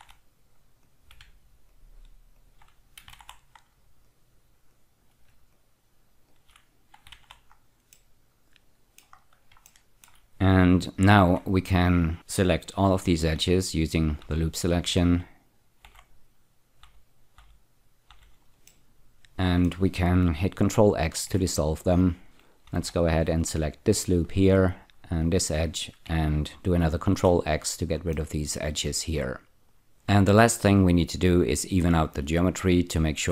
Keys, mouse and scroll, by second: 0.0 alt+y, 0.9 click, 1.7 shift+click, 2.4 shift+click, 3.2 y, 4.1 click, 4.7 click, 5.6 shift+click, 6.3 shift+click, 7.3 y, 7.9 middle click, 9.4 scroll down 1, 9.7 shift+middle click, 11.3 2, 13.4-18.1 typing, 18.7 middle click, 21.2 ctrl+x, 21.8-22.2 scroll down 1, 22.2 click, 22.7 typing, 24.2 shift+click, 24.9-26.0 scroll down 5, 27.0 ctrl+x, 28.1-29.9 middle drag.